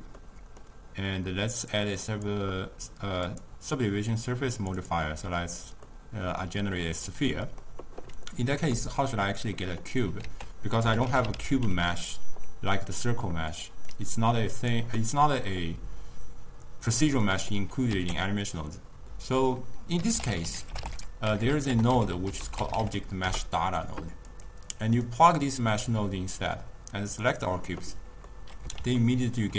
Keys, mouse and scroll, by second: 0.3-1.7 middle drag, 1.7 drag, 2.2-5.9 drag, 5.9-10.3 middle drag, 10.3 ctrl+a, 14.0-17.0 drag, 18.0 ctrl+a, 21.5 BackSpace, 25.1 drag, 27.2-28.4 drag, 28.4-29.5 middle drag.